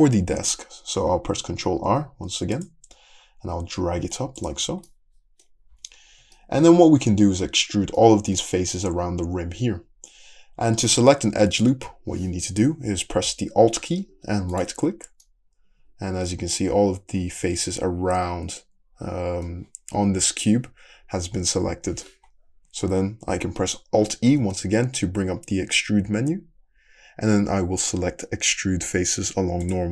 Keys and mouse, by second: 1.9 ctrl+r, 5.7 `, 7.3 middle click, 7.5 3, 8.0 middle click, 14.5 alt+click, 15.0-24.1 middle drag, 24.3 alt+e, 27.3-29.9 middle drag.